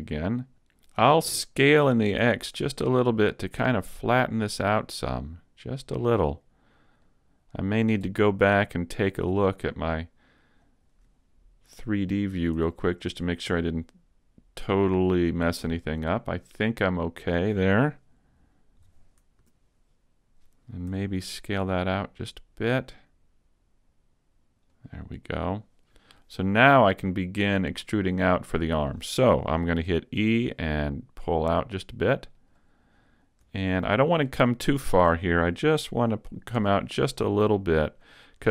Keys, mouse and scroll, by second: 0.1 scroll down 1, 0.6 shift+middle click, 1.9 s, 5.1 s, 6.0 click, 7.0 click, 8.8 click, 12.1 middle click, 12.6 z, 12.9 middle click, 18.8 KP_3, 18.9 KP_3, 19.4 z, 20.9 s, 24.9 click, 30.2 e, 32.5 click, 33.2 scroll up 1, 33.6 shift+middle click, 34.4-35.0 scroll up 2, 34.8 shift+middle click, 36.6 r, 38.0 click.